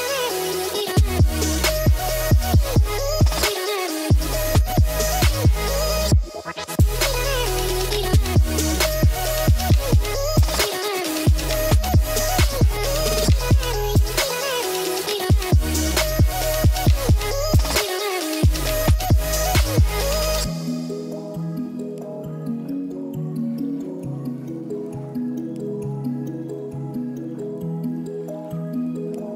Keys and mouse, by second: 1.7 middle drag, 2.0 shift+d, 2.9-4.1 drag, 4.2-5.6 middle drag, 5.6 g, 6.0-6.4 drag, 6.5 ctrl+s, 7.1-7.5 drag, 7.6 shift+a, 10.4 middle click, 11.3-12.9 drag, 13.7 middle click, 14.9 click, 15.7 middle click, 18.0-18.4 middle drag, 19.0 click, 19.6 s, 21.5 click, 21.7 middle drag, 22.1 ctrl+s, 22.6 h, 23.3 shift+drag, 24.9 click.